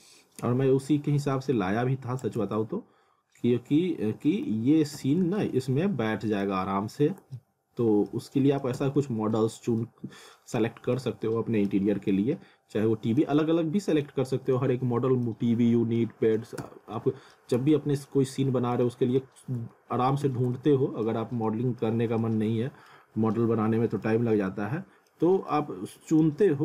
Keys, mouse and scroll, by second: 2.4 z, 3.2 scroll up 1, 4.5 alt+w, 4.9 z, 5.4 alt+middle click, 7.0 scroll up 1, 7.4 alt+middle click, 8.2 alt+middle click, 8.7 z, 9.0 alt+middle click, 9.9 alt+middle click, 10.7 scroll up 1, 10.9 alt+middle click, 11.9 scroll down 1, 12.1 alt+middle click, 13.3 alt+middle click, 14.6 alt+middle click, 15.5 scroll down 1, 16.0 alt+middle click, 16.6 z, 17.0 alt+middle click, 17.6 z, 18.1 alt+middle click, 18.9 alt+middle click, 19.7 alt+middle click, 20.2 z, 20.6 alt+middle click, 21.5 alt+middle click, 22.0 scroll up 1, 22.2 alt+middle click, 23.1 scroll down 1, 23.4 alt+middle click, 24.3 scroll up 1, 24.5 alt+middle click, 25.4 alt+scroll down 1, 25.5 alt+middle click, 26.4 alt+middle click.